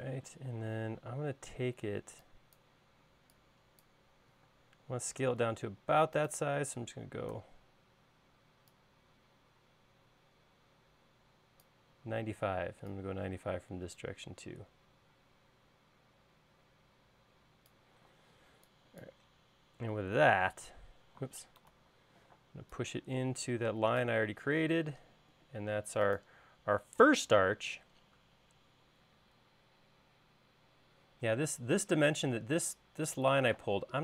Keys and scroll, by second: 2.2 e, 5.0 space, 7.8 s, 18.7 e, 22.2 super+z, 22.9 p, 25.2 space.